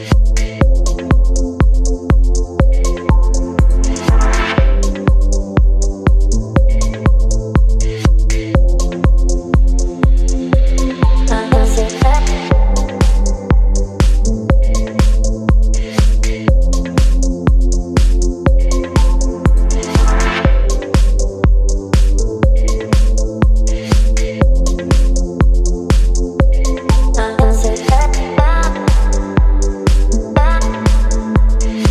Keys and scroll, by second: 13.0 x, 13.5 ctrl+BackSpace, 14.1 ctrl+d, 29.9 KP_1, 30.0 KP_5.